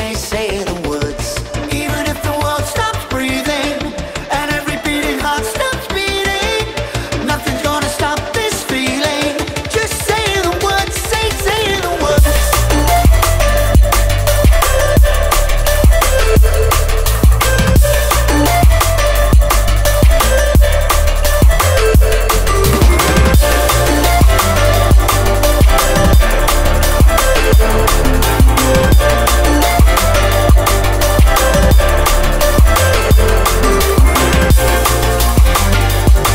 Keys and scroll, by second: 9.8 ctrl+g.